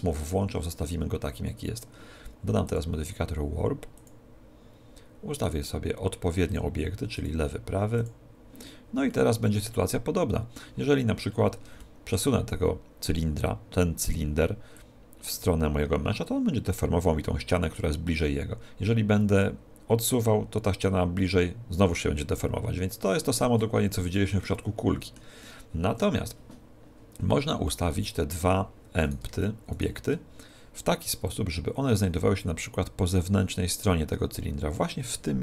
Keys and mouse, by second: 0.4 t, 2.7 click, 5.5-9.0 drag, 9.1-13.6 middle drag, 14.8 click, 24.6-29.5 middle drag, 29.1-31.7 right drag, 31.3 click.